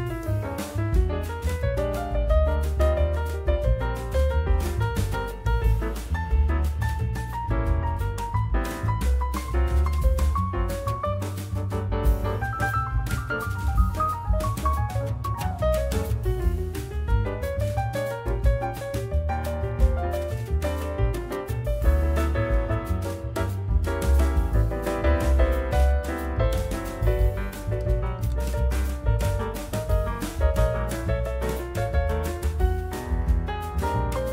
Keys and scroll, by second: 0.7 alt+x, 1.6 F4, 2.0 2, 12.1 ctrl+z, 12.6 ctrl+alt+e, 15.6 w, 15.9 alt+x, 16.6 F4, 19.1 F4, 24.8 F4, 32.9 alt+q, 33.8 alt+1.